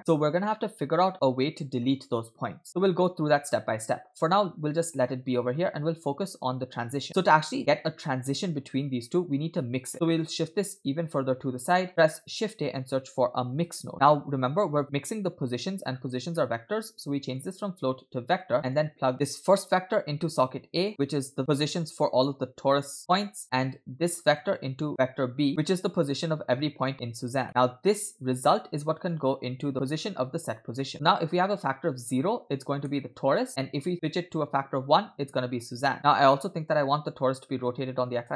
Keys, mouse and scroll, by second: 7.1 middle click, 9.9-10.3 drag, 9.9 middle click, 10.7-11.8 drag, 11.9 middle click, 11.9 scroll up 2, 12.1 shift+a, 15.9 scroll up 2, 16.3 middle click, 16.6-17.3 scroll up 1, 17.3-18.5 drag, 18.7 click, 19.1 middle click, 19.1-19.6 scroll down 5, 19.7-21.4 drag, 23.4 middle click, 24.4-26.0 drag, 27.5 middle click, 27.5-28.4 scroll up 2, 28.5-30.0 drag, 30.8 middle click, 31.5 click, 32.5-32.8 scroll down 3, 32.9-33.2 shift+middle drag, 34.0-36.8 drag.